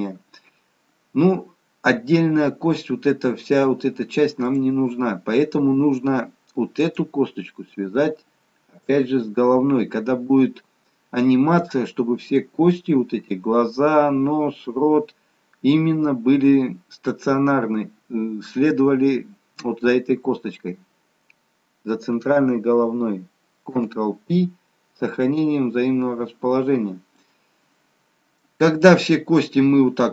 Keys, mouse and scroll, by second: 4.6 click, 6.9 click, 8.8 shift+click, 9.2 shift+click, 23.8 ctrl+p, 26.3-26.9 scroll down 1, 26.9 scroll down 1, 27.2 middle click.